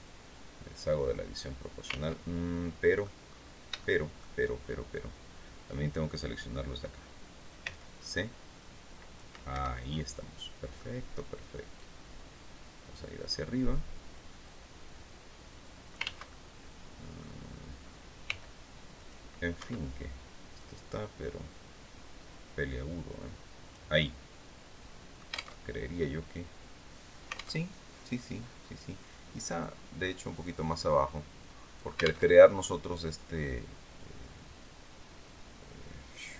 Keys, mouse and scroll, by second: 1.5 ctrl+z, 2.0 ctrl+click, 3.3 shift+click, 4.4 click, 7.1 c, 7.7-8.8 drag, 9.0 Escape, 9.3-9.6 scroll down 2, 9.6 click, 11.2-15.6 drag, 15.4 ctrl+z, 15.8-16.8 ctrl+drag, 17.7 c, 18.4 click, 19.0 Escape, 20.0-23.4 drag, 23.4-25.0 middle drag, 25.0 alt+Tab, 27.1 alt+Tab, 29.1-31.5 drag, 31.7 alt+Tab.